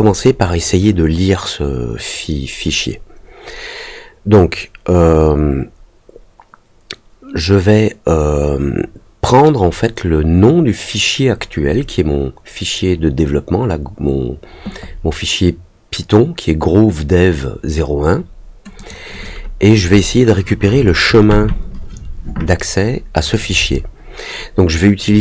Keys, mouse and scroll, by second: 18.7 click.